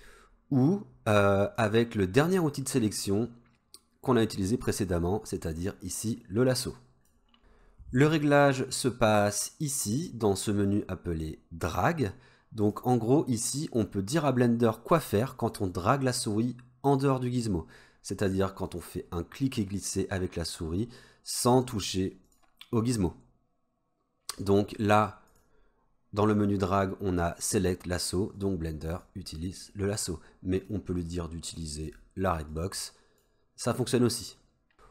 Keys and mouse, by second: 1.6-7.1 drag, 12.8-17.7 drag, 18.7-21.7 drag, 25.3-28.7 drag, 29.2 click, 30.8-32.2 drag, 32.7-33.3 drag.